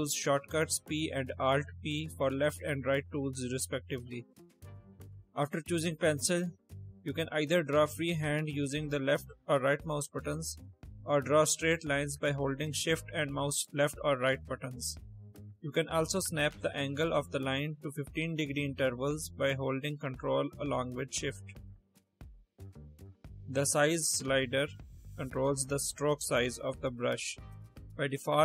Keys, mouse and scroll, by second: 0.0 p, 2.4 alt+p, 5.9 click, 7.5 click, 8.6 right click, 9.6 right click, 10.4 ctrl+shift+click, 10.9-12.2 shift+drag, 12.7 shift+click, 13.3 shift+click, 13.8 shift+click, 14.3 shift+click, 15.0 shift+click, 16.2 ctrl+shift+click, 17.0 ctrl+shift+click, 17.9 ctrl+shift+click, 18.8 ctrl+shift+click, 19.6 ctrl+shift+click, 20.5 ctrl+shift+click, 24.8 click, 26.6-27.1 drag, 27.8 click.